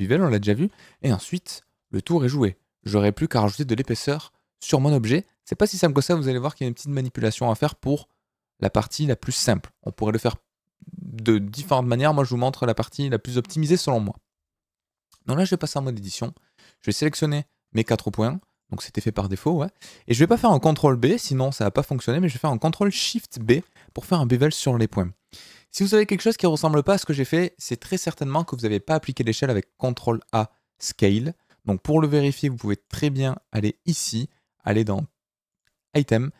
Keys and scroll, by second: 0.6 ctrl+z, 1.7 d, 9.7 Tab, 15.3 Tab, 20.7 ctrl+b, 21.8 Escape, 23.3 ctrl+shift+b, 27.7 Escape, 28.3 Tab, 29.7 ctrl+a.